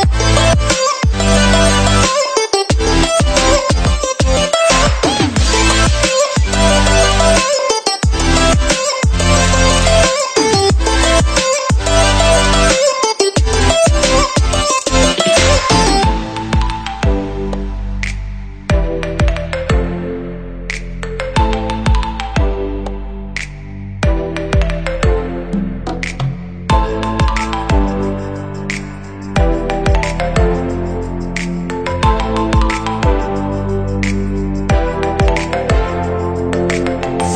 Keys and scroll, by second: 21.7 p, 24.4 p, 30.3 p, 34.2 p.